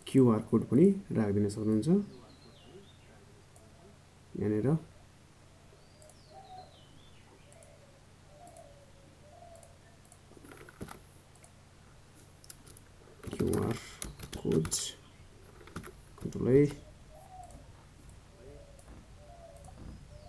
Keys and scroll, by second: 18.5 ctrl+a.